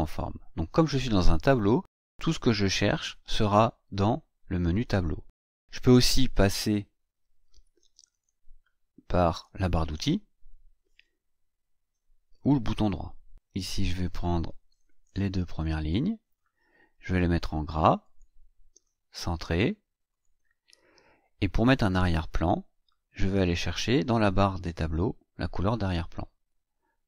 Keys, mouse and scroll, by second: 8.1 click, 13.9-16.0 drag, 18.0 click, 20.0 click.